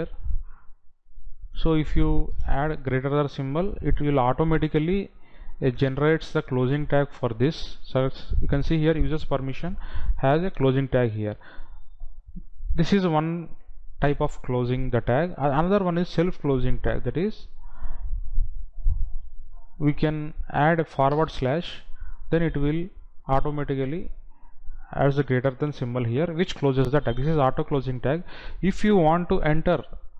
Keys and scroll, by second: 19.7 Delete.